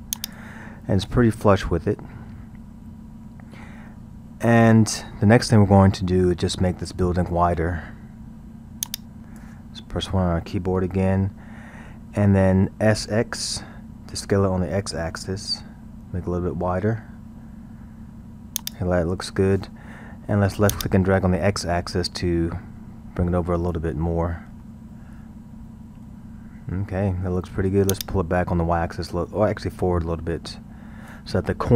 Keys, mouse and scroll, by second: 0.6 scroll, 3.9-4.8 middle drag, 4.8-5.2 scroll, 5.2-8.2 middle drag, 8.9-10.7 drag, 10.7 KP_1, 14.0 s, 20.7-23.8 drag, 24.6-27.6 middle drag, 27.9 click.